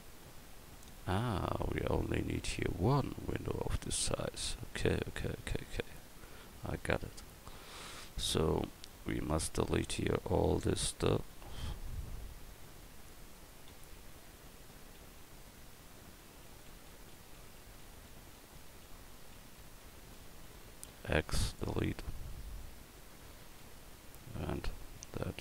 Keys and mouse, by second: 3.5 Tab, 5.4 a, 8.1-10.8 typing, 12.1 a, 13.7-21.0 typing, 23.6 l, 24.6 l, 25.3 x.